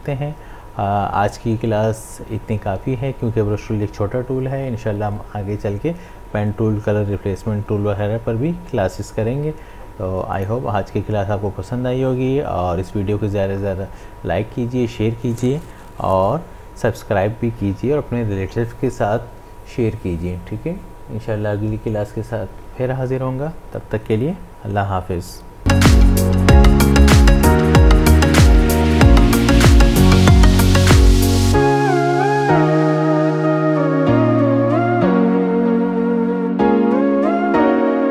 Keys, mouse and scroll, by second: 10.4 click.